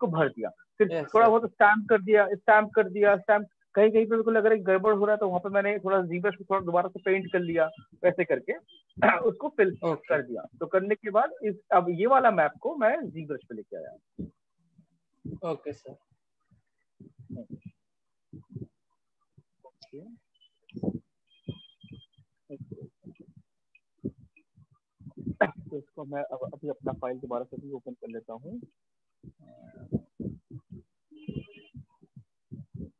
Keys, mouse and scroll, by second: 0.1 click, 0.2 click, 0.7 click, 1.9 click, 2.1 ctrl+space, 2.1 click, 2.2 click, 2.3 click, 2.5 click, 2.6 click, 2.7 click, 2.7 click, 2.8-3.2 click, 3.4 click, 3.5 click, 3.8 click, 3.9 click, 3.9 click, 4.0 click, 4.1 click, 4.2 click, 4.3 click, 4.5 click, 4.6 click, 4.7 click, 4.8 click, 4.9 click, 4.9 click, 5.1 click, 8.9 ctrl+-, 9.6 ctrl+-, 9.6 click, 9.7 click, 9.8 click, 11.3 click, 12.5 click, 17.3 click, 18.7 shift+click, 20.1 click, 23.0 alt+click, 24.0 click, 27.2 click, 27.3 click, 29.8 click, 30.9 click, 32.6 click.